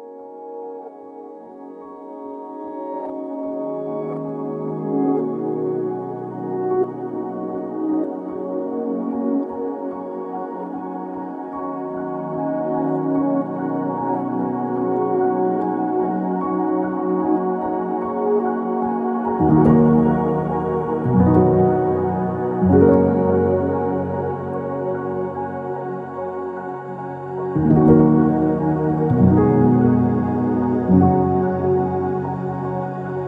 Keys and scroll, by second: 0.3 BackSpace, 5.1 typing, 5.1 Return, 7.0 ctrl+z, 12.4 Escape, 14.0 Escape, 21.6-22.9 typing, 25.8-26.5 typing, 27.1 Return, 28.4 ctrl+z, 29.8-30.6 typing.